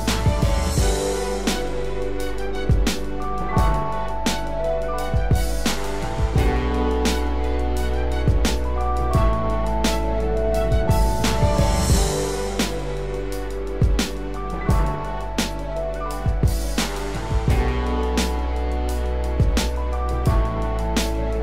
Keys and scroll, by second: 1.2 ctrl+=, 7.2 ctrl+alt+z, 14.1 ctrl+alt+z.